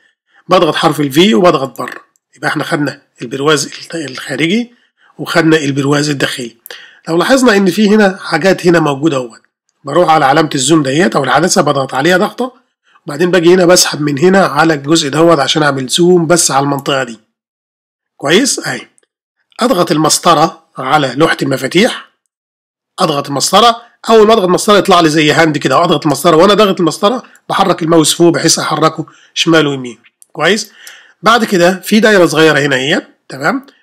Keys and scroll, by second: 1.1 ر, 23.1 space, 24.5 space, 26.1 space.